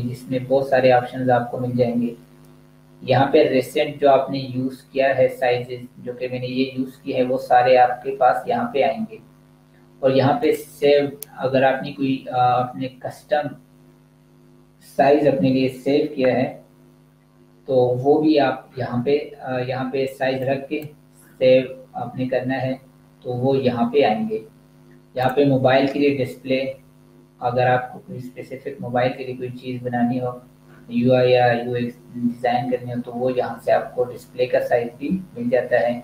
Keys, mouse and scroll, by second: 10.2 click, 20.1 click, 25.6 click.